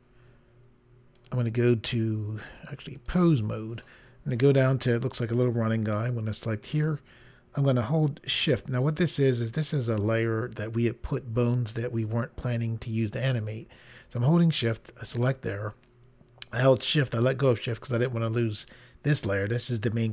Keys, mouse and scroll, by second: 1.1 click, 2.9 click, 6.7 click, 14.5 shift+click.